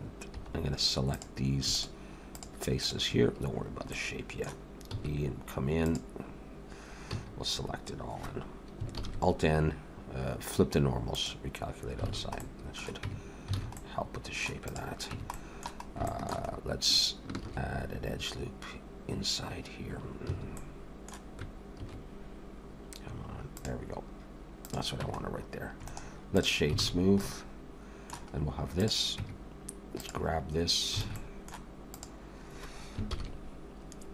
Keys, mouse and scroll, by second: 0.4 3, 0.5-1.1 scroll up 2, 1.1 click, 1.7 shift+click, 2.3 click, 3.9 middle click, 4.9 e, 7.0 a, 9.0 alt+n, 12.1 alt+a, 12.4 middle click, 13.1 Tab, 13.6 alt+a, 13.7 middle click, 14.6 click, 15.1 Tab, 15.3 middle click, 15.8 scroll up 1, 16.0 shift+middle click, 16.5 scroll up 1, 17.4 ctrl+r, 20.6 middle click, 21.8 ctrl+r, 25.0 Tab, 25.2-25.8 scroll down 3, 25.9 right click, 26.8 alt+a, 26.9 scroll down 2, 27.2 middle click, 28.3 scroll up 2, 28.8 click, 29.2 Tab, 30.0 click, 31.0 alt+a, 31.1 middle click, 32.0 click, 33.1 ctrl+l.